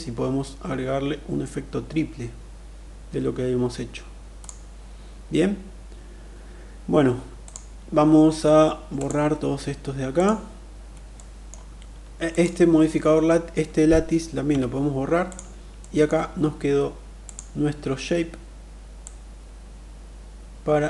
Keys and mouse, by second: 8.5 click, 9.7 click, 10.8-11.1 middle drag, 11.8 click, 14.0 Delete, 15.4 middle click, 16.9 drag, 18.5-20.8 drag.